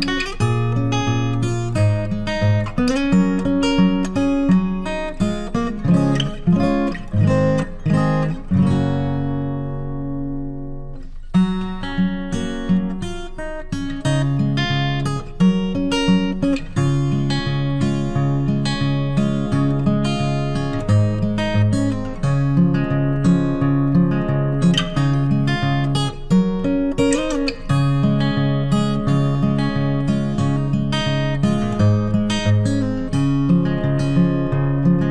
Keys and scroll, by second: 13.8 ctrl+t.